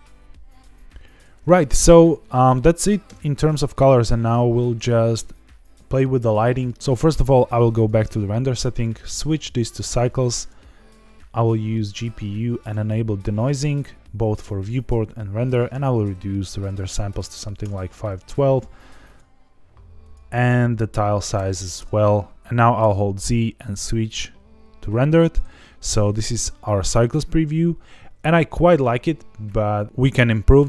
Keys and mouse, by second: 1.1 click, 1.5-2.5 middle drag, 3.0 KP_0, 7.7 click, 8.7-9.7 drag, 10.3-11.5 drag, 12.6 click, 13.3 click, 15.5-17.7 drag, 19.1 drag, 20.0-22.1 drag, 22.3 y, 22.8 z.